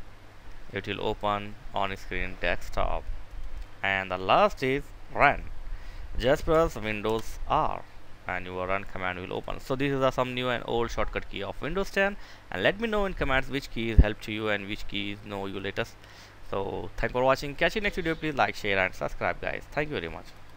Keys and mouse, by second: 7.0 super+r, 9.0 click.